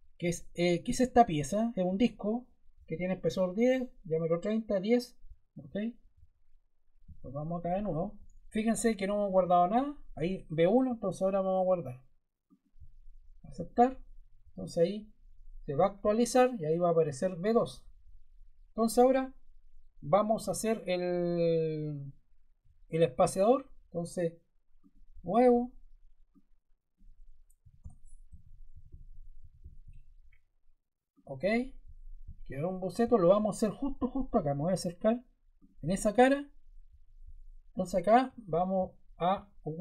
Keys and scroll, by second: 27.3-30.2 typing.